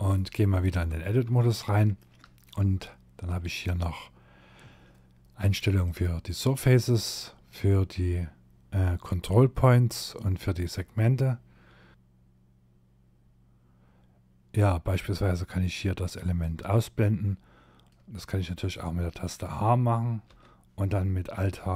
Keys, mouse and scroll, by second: 0.4 shift+middle click, 4.9 click, 17.7 click, 19.3 h, 21.3 h.